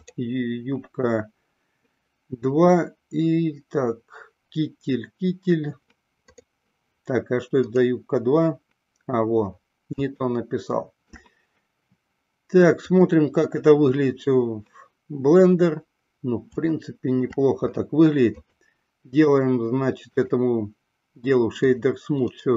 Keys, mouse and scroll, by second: 10.3-11.5 shift+middle drag, 14.1 click, 17.0-17.6 shift+middle drag, 18.6 click, 19.5 right click, 21.7 click.